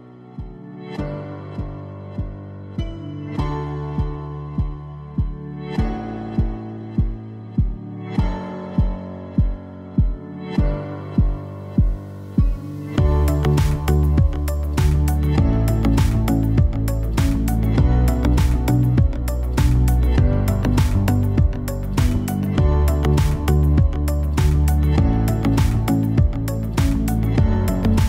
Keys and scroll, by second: 3.5 5, 5.2 0, 5.9 Return.